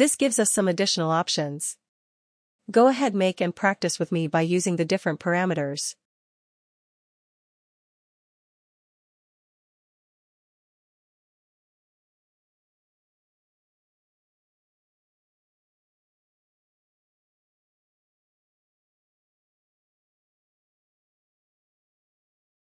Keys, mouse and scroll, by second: 1.4 ctrl+click, 5.3 click, 9.2 click, 15.7 click, 16.4 click, 18.1 click, 22.4 click.